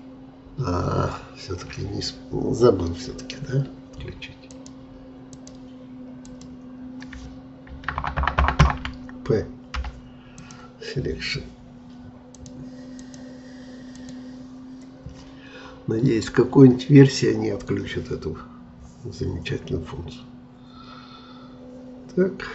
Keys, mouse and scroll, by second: 4.5-7.6 drag, 7.6 ctrl+KP_Add, 7.9 ctrl+KP_Add, 8.1 ctrl+KP_Add, 8.3 ctrl+KP_Add, 8.6 ctrl+KP_Add, 9.8 p, 12.3-16.8 drag, 19.6 scroll up 1.